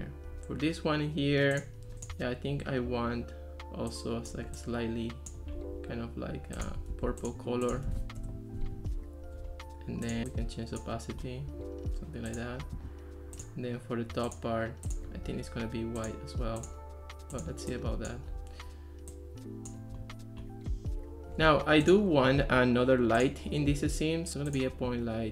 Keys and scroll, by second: 6.9 super+c, 7.9 super+v, 8.2 Return, 21.5 Escape.